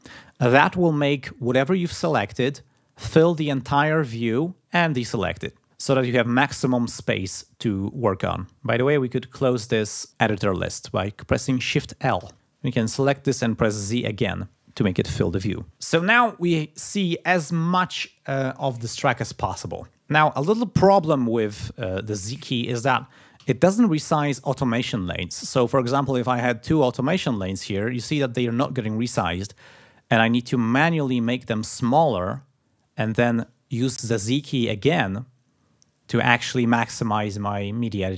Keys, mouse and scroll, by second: 12.2 shift+l, 12.8 click, 13.8 z, 23.4 z, 30.5 click, 31.8 click, 33.0 click, 34.8 z.